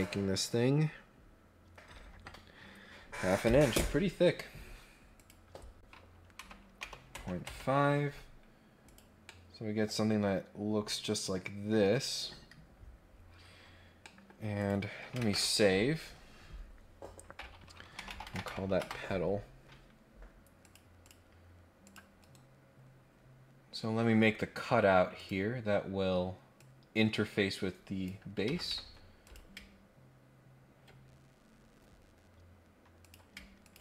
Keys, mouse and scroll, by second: 5.1 click, 8.8 click, 9.2-11.3 middle drag, 13.2 scroll down 1, 13.5 scroll up 1, 14.0 middle click, 14.5 click, 20.6 click, 21.0 click, 21.8 click, 22.8 scroll down 2, 23.0 scroll up 2, 25.1 click, 26.5-28.0 drag, 28.4 Escape, 28.6 Escape, 29.2 click, 31.2 scroll down 2, 31.4 scroll up 2, 33.0 click, 33.6 ctrl+click.